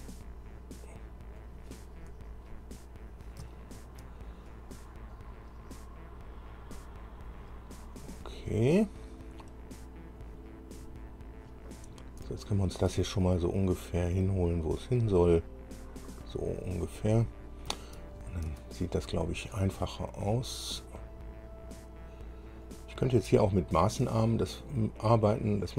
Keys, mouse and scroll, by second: 2.2-2.7 scroll up 2, 3.8 shift+middle click, 5.3-7.6 drag, 9.4-10.5 drag, 12.0 scroll down 2, 12.6 shift+click, 14.2-17.0 drag, 17.3-17.6 scroll up 2, 18.3 shift+scroll up 2, 22.8-25.7 drag.